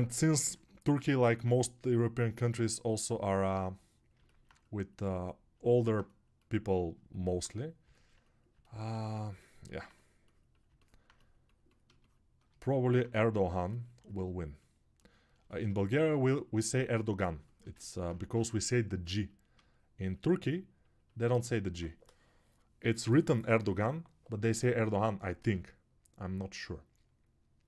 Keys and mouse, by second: 18.4 ctrl+z.